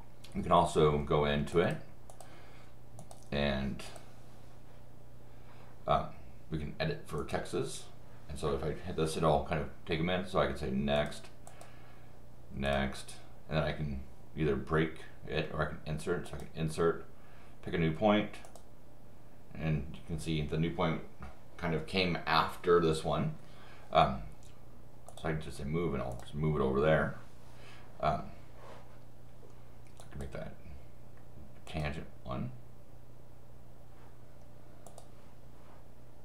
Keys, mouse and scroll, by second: 1.5 click, 2.1 click, 3.0 click, 3.9 click, 7.2 click, 10.9 click, 11.5 click, 12.7 click, 16.3 click, 18.4 click, 25.1 click, 26.1 click, 30.0 click, 31.7 click, 34.9 click.